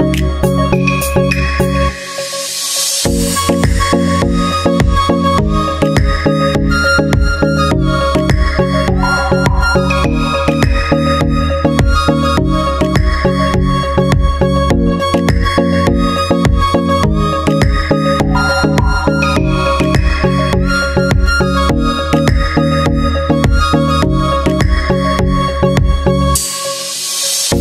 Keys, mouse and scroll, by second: 2.0-3.0 drag, 3.6-5.6 drag, 5.6 middle click, 5.7-7.0 drag, 8.2-10.5 middle drag, 8.7-10.7 drag, 10.8-11.8 drag, 12.6-14.1 drag, 14.9-15.9 drag, 17.4-18.4 drag, 18.6-21.3 drag, 21.9-24.0 drag, 25.6-27.6 drag, 27.2-27.6 middle drag.